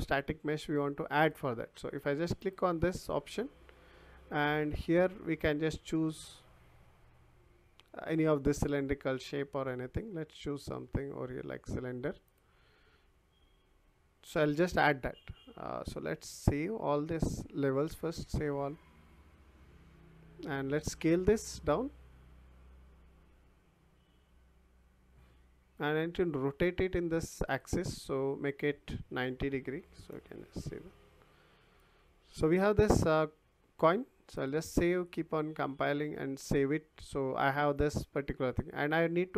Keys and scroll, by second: 29.4 9, 30.1 Return.